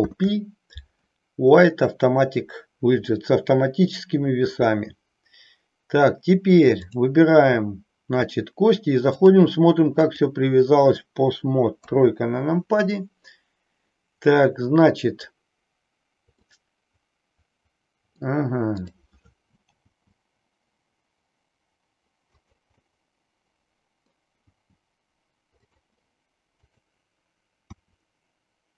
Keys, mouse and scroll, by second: 9.1-10.4 drag, 11.7 KP_3, 16.4-18.2 middle drag, 18.6-20.2 drag, 20.4 g, 22.9-24.0 middle drag, 24.5 g, 25.8 click, 26.6 click, 27.7 r.